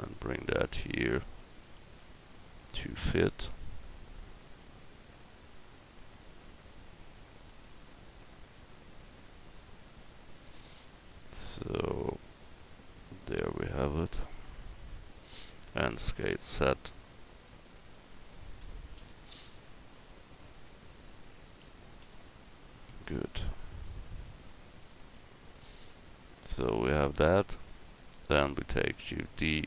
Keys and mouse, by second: 1.8 s, 4.0-7.2 drag, 7.5 s, 9.8-10.9 drag, 11.5-14.0 drag, 14.3-15.8 drag, 15.8 s, 18.6 s, 21.6 s, 23.8 s, 28.9 shift+d.